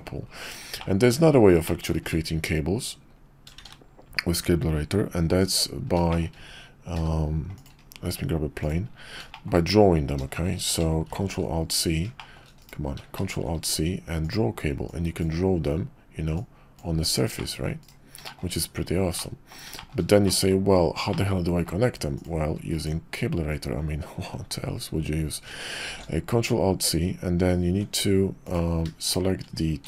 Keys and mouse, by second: 0.8-1.1 middle drag, 1.6 shift+middle click, 2.1 `, 3.6 shift+a, 6.1 shift+drag, 6.9 g, 8.0 s, 9.3 shift+click, 9.7 KP_5, 11.1 ctrl+alt+shift+c, 12.2 shift+click, 12.7 click, 13.2 alt+shift+c, 14.9-17.9 drag, 18.2 shift+middle click, 19.2-19.5 middle drag, 19.7 shift+middle drag, 20.2 drag, 21.1 middle click, 22.2-22.9 drag, 25.8 alt+shift+c, 27.7 Tab, 28.4 click, 29.0 shift+click.